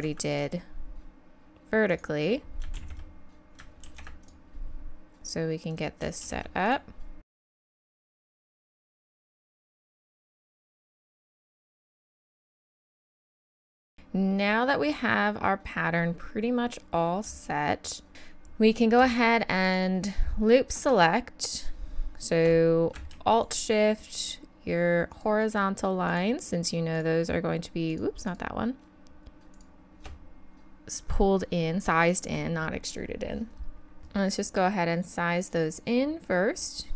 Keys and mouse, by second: 2.8 ctrl+z, 3.8 ctrl+r, 6.2 ctrl+r, 7.4 ctrl+r, 7.7 ctrl+r, 8.0 ctrl+r, 8.3 ctrl+r, 8.5 click, 9.5 ctrl+r, 9.9 ctrl+r, 10.2 ctrl+r, 10.5 ctrl+r, 10.7 ctrl+r, 11.0 ctrl+r, 11.2 ctrl+r, 11.7-13.7 typing, 13.6 click, 18.1 a, 19.6 right click, 20.0-21.7 drag, 23.5-34.0 drag, 34.0 s.